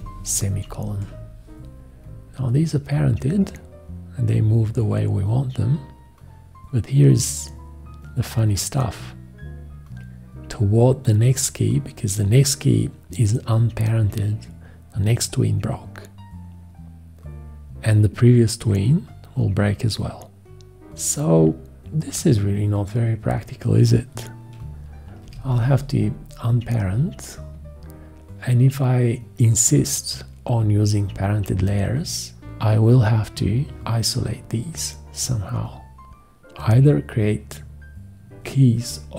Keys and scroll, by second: 25.2 alt+;, 38.3 x.